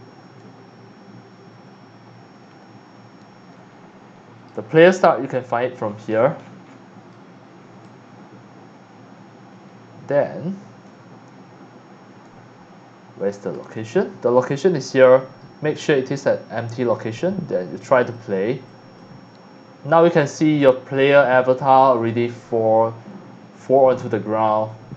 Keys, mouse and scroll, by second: 5.2 click, 5.8-6.8 scroll down 4, 7.1-9.2 right drag, 10.3-13.5 right drag, 14.9-16.9 drag, 15.2 right click, 18.0 click, 18.6 click, 20.5 click, 24.0 space.